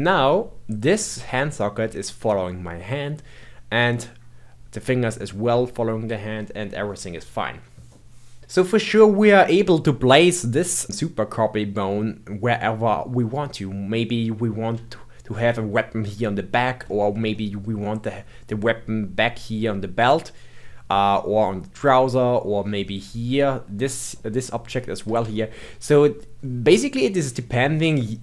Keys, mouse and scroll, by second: 6.3-7.9 scroll down 2, 7.9 middle click, 8.8-10.9 middle drag, 13.3-14.5 middle drag, 14.5-14.9 scroll up 1, 14.9-20.3 shift+middle drag, 20.8-22.6 middle drag, 22.6-23.7 scroll up 2, 23.7-24.1 scroll down 1, 24.1-28.2 middle drag.